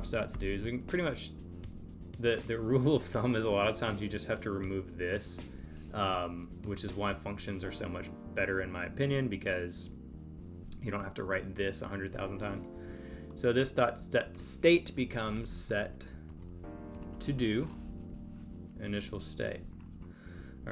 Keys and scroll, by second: 18.1 super+Right.